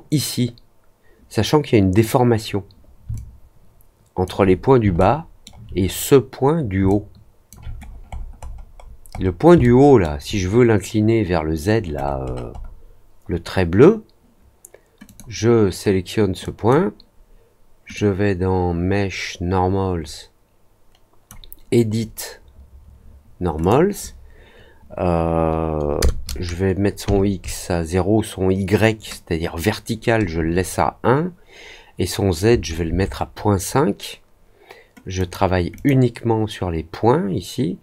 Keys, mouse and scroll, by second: 3.1-4.2 alt+drag, 4.9 alt+middle click, 6.8 alt+click, 7.7-9.3 scroll down 8, 9.5 alt+middle click, 11.9 scroll down 2, 12.2 middle click, 12.5 middle click, 15.0 click, 16.4 click, 17.9-21.2 drag, 23.5 click, 35.1 click, 35.7 click.